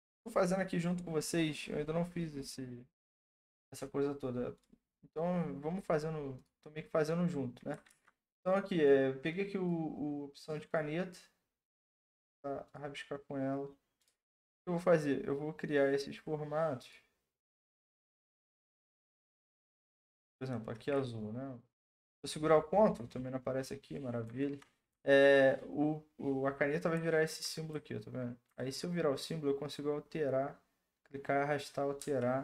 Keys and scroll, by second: 7.9 ctrl+z, 32.0 ctrl+z.